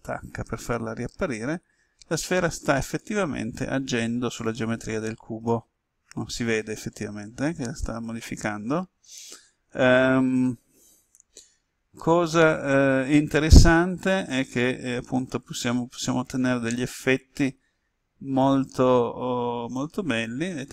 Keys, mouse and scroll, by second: 0.1 alt+h, 2.9-16.6 drag, 16.6-17.9 middle drag, 18.4-19.8 drag, 20.6 h.